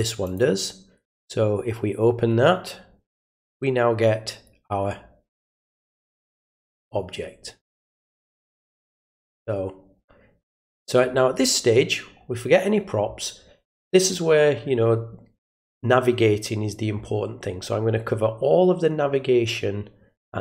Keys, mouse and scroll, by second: 0.2 click, 3.9 middle click, 5.0 middle click, 5.4-5.9 scroll down 1, 6.7 middle click, 8.3 scroll up 1, 8.9-10.4 middle drag, 10.6 scroll up 1, 10.6 scroll down 1.